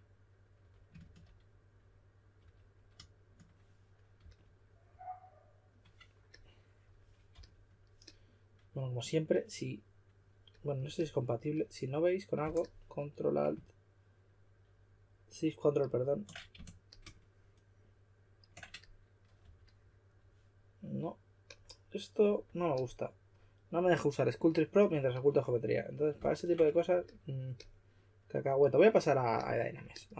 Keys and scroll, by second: 0.6 5, 2.3 5, 4.2 s, 7.3 typing, 19.4 4.